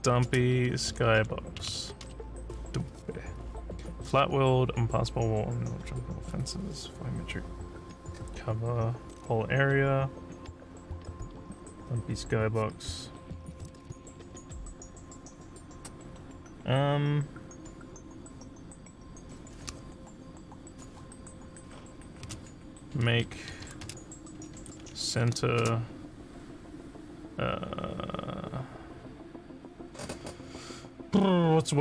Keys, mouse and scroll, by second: 0.9 s, 23.1-25.7 typing.